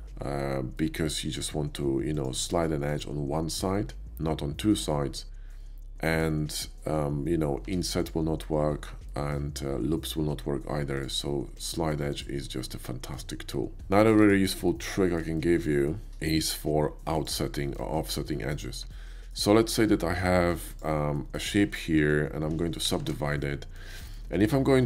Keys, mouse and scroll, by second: 0.7 shift+middle click, 2.0 click, 2.7 click, 5.5 middle click, 7.7 Tab, 8.0 click, 9.0 shift+middle click, 10.9 shift+click, 11.6 shift+click, 12.1 click, 12.7 middle click, 13.7 Tab, 14.1 x, 14.2 Tab, 14.2 click, 14.5 middle click, 14.7-15.2 middle drag, 15.4 shift+middle click, 15.9 shift+middle click, 16.1 shift+a, 17.2 click, 17.5 middle drag, 18.0 shift+middle drag, 18.4 middle click, 18.9 Tab, 19.3 right click, 20.7 click, 21.1 middle click, 22.9 shift+r, 23.1 shift+r, 23.5 middle click, 24.1 shift+middle click, 24.4 shift+middle click.